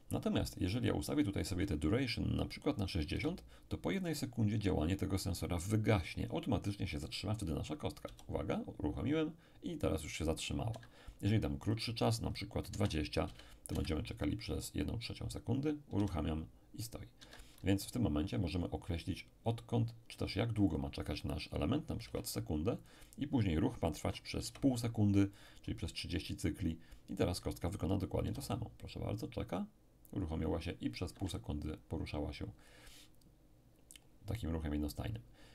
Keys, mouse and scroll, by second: 1.4 click, 3.1 6, 4.0 click, 4.0 0, 8.1 p, 10.7 Escape, 11.7 click, 12.7 2, 13.3 0, 13.7 Return, 16.0 p, 17.2 Escape, 20.7 click, 22.0 6, 22.4 0, 22.8 click, 24.0 3, 24.4 0, 25.4 click, 28.2 p, 31.1 Escape.